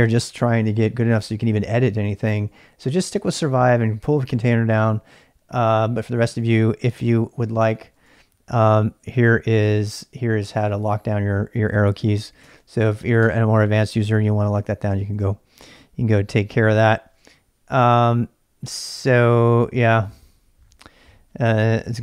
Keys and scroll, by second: 7.7-8.5 typing, 10.5-11.3 typing, 12.5 ctrl+[, 13.2 u, 13.9 ctrl+[, 14.0 ctrl+j, 14.8 j, 14.9 ctrl+[, 15.6 shift+z, 16.9 shift+z.